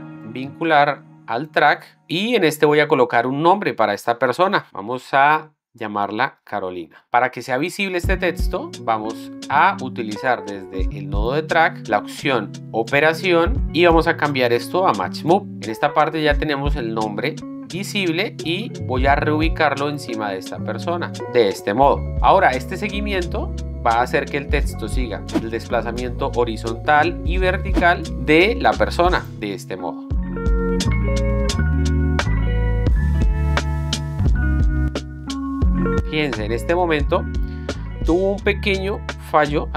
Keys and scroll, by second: 6.3-7.3 typing, 29.6 space.